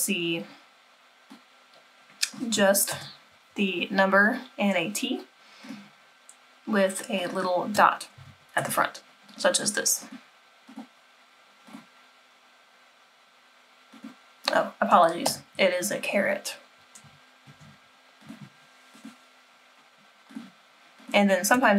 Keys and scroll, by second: 2.9 BackSpace, 8.2 Left, 8.6 Left, 15.3 BackSpace.